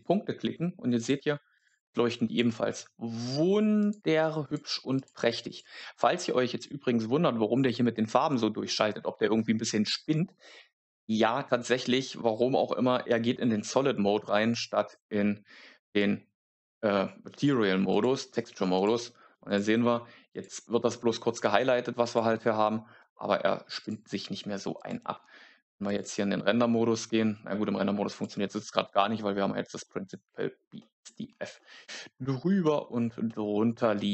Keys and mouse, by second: 2.2 click, 3.7 click, 4.3 click, 5.4 click, 14.5 click, 17.8 click, 18.7 click, 19.4 click, 20.2 click, 22.0 click, 23.7 click, 24.7 click, 30.3 shift+middle click.